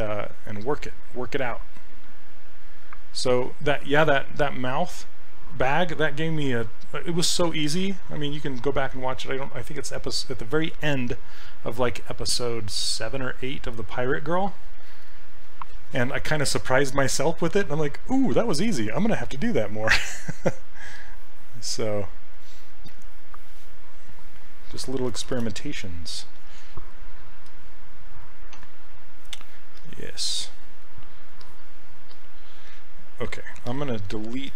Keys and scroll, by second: 25.3 shift+f, 27.5 f, 28.6 d.